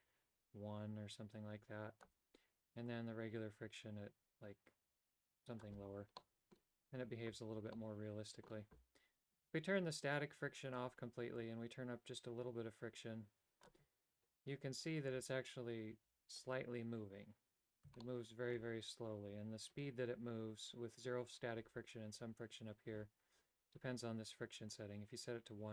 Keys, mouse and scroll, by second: 3.0-5.8 drag, 6.3 middle click, 7.9 middle click, 10.0 click, 11.5-13.8 drag, 18.1 shift+middle click, 24.9-25.7 drag.